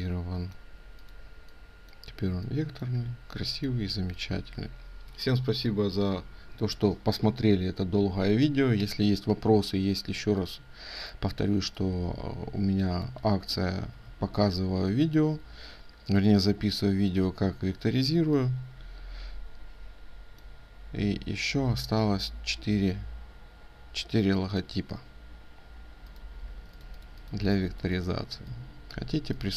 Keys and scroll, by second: 26.0 ctrl+space.